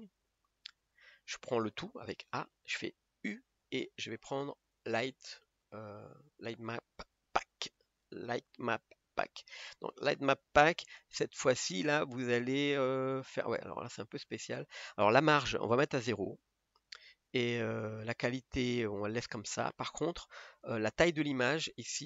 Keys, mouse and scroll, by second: 0.0 click, 1.0 scroll up 1, 2.3 a.